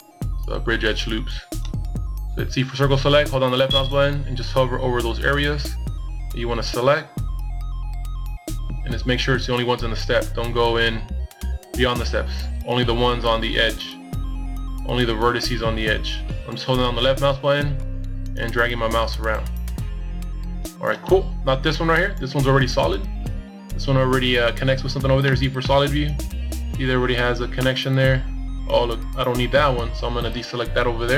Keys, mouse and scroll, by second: 21.7 z, 22.0 middle click, 24.0 middle click, 28.8 KP_1, 29.6 z, 30.9 c.